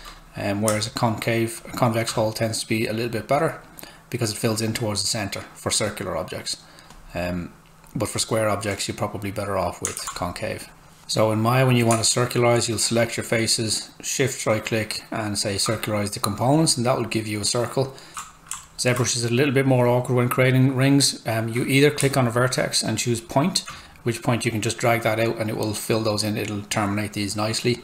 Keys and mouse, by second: 0.7 space, 3.0 click, 6.9 click, 10.0 ctrl+z, 11.0 click, 12.3 shift+right click, 18.1 w, 18.6 alt+middle click, 22.0 space, 23.0 click, 23.1 space, 24.4 click.